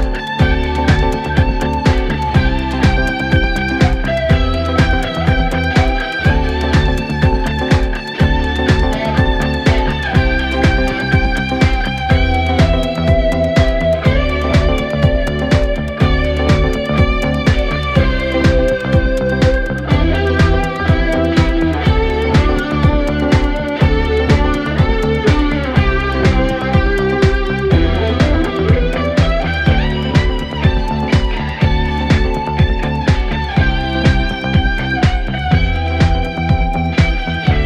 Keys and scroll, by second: 0.3 F1, 3.0 shift+r, 3.1 shift+o, 3.3 shift+t, 3.4 Return, 4.7 p, 5.8 p, 6.9 3, 8.2 ctrl+z, 9.8 p, 11.3 ctrl+z, 11.9 1, 12.6 p, 14.8 p, 15.7 3, 20.1 F9, 20.7 1, 21.3 p, 21.9 3, 23.4 ctrl+z, 24.7 ., 27.0 ctrl+z, 29.2 ctrl+z.